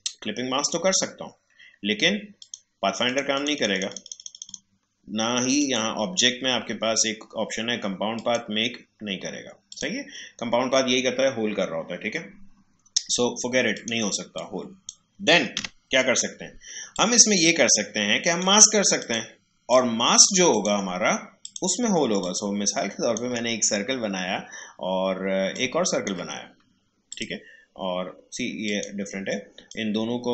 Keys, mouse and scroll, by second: 2.4 click, 8.1 click, 13.7 click, 15.5 Delete, 16.9-25.5 drag, 25.5-30.3 drag.